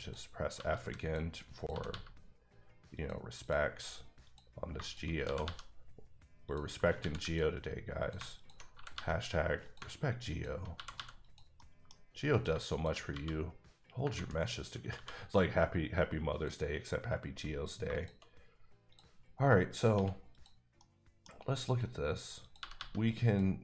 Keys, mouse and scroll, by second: 0.0 click, 0.5 g, 0.8 g, 1.0 click, 1.5 click, 1.7 g, 1.8 g, 2.9 click, 3.4 click, 4.3 click, 5.2 g, 5.4 g, 6.4 click, 7.0 ctrl+r, 7.2 ctrl+click, 8.7 g, 8.9 g, 9.6 click, 10.7 g, 10.9 g, 11.2 click, 11.5 middle click, 12.3 click, 13.1 f, 14.1 ctrl+z, 14.9 f, 16.3 click, 17.8 shift+click, 19.7 click, 19.9 x, 20.3 click, 20.8 middle click, 22.4 click, 22.6 g, 22.7 g, 23.2 click.